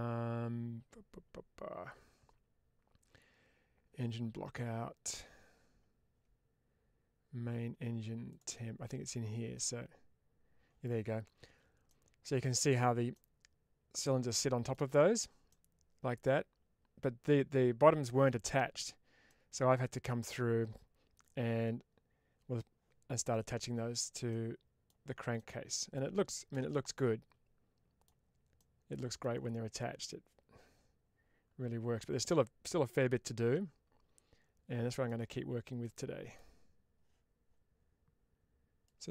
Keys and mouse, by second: 9.7 click, 11.7-12.4 middle drag, 13.0-14.6 middle drag, 15.4-16.1 middle drag, 19.1-19.9 middle drag, 23.0 middle click, 24.3-24.7 middle drag, 25.2-25.8 middle drag, 26.4 shift+space, 26.8-27.9 middle drag, 28.4-29.1 middle drag, 29.6-34.9 middle drag, 35.7-36.2 middle drag.